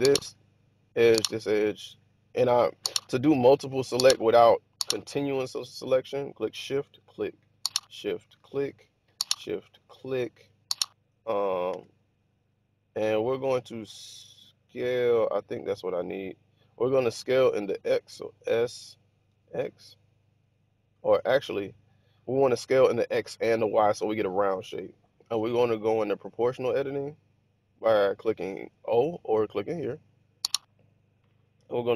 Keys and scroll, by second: 11.7 1, 18.3 s, 19.2 x, 21.2 Escape.